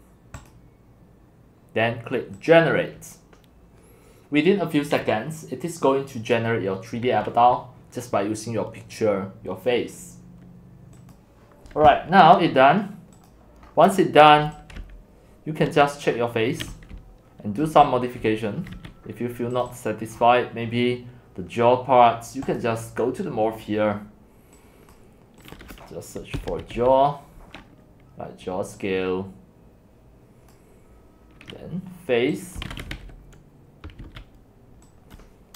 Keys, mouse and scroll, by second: 0.4 click, 2.4 click, 8.0-8.6 drag, 10.9 click, 12.7-13.0 scroll, 13.1 scroll up 4, 13.3 middle click, 13.3 click, 13.7 middle click, 13.7-14.5 scroll, 14.5-18.8 typing, 15.8 right click, 15.9 shift+scroll up 4, 16.1 shift+click, 17.6 click, 18.7 right click, 19.6 right click, 19.8 click, 20.2-21.3 scroll up 11, 21.3-22.6 middle drag, 21.3 scroll, 22.6-24.8 right drag, 24.8-26.4 drag, 26.1-27.3 typing, 30.5-30.9 right drag, 32.3-33.5 typing, 35.2 right click, 35.2 click.